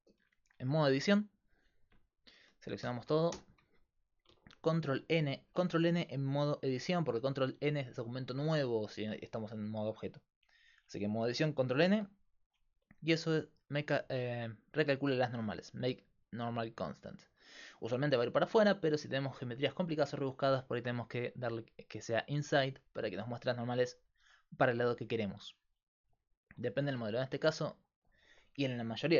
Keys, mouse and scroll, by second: 1.5-2.8 drag, 2.8 a, 3.3 a, 6.7-11.8 drag, 11.8 ctrl+n, 17.0 click, 17.2 right click, 17.4-18.7 drag, 21.0-22.7 drag, 25.3-26.9 drag, 26.9 Tab.